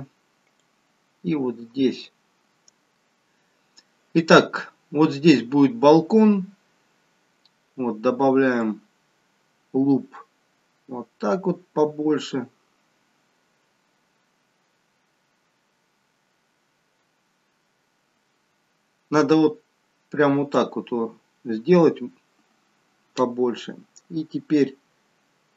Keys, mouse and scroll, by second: 0.5 click, 8.7 click.